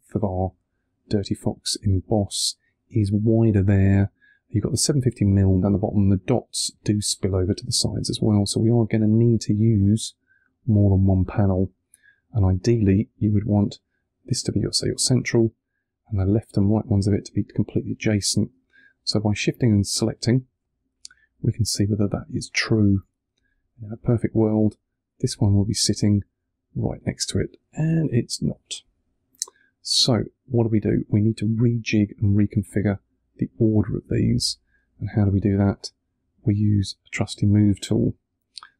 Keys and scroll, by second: 20.9 3, 26.2 3.